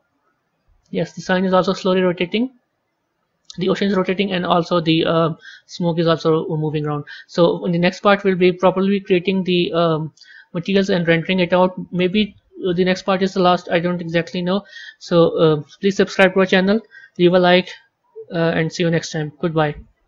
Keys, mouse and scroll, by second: 6.5-10.5 drag, 13.9 a.